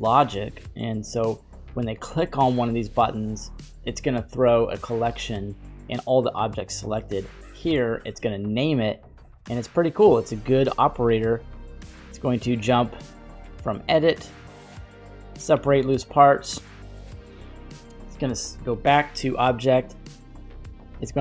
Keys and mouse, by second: 11.6 middle click, 13.5-14.4 middle drag, 14.9 click, 16.1-17.2 middle drag, 18.0-19.4 drag, 19.9 middle click, 21.1-21.2 drag.